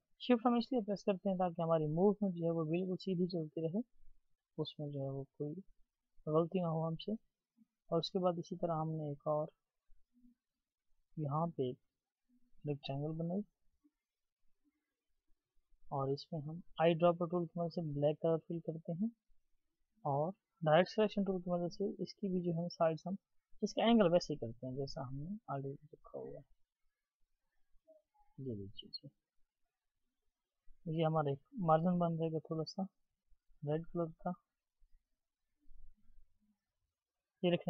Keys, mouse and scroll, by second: 5.8-7.0 scroll down 1, 23.2-29.9 scroll down 1, 37.5-37.6 scroll down 1.